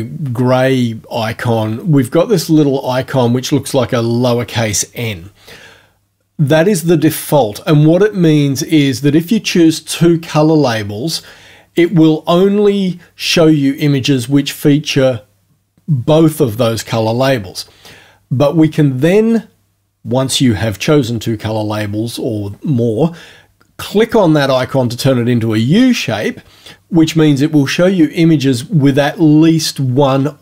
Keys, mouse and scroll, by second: 11.1 click, 11.9 click.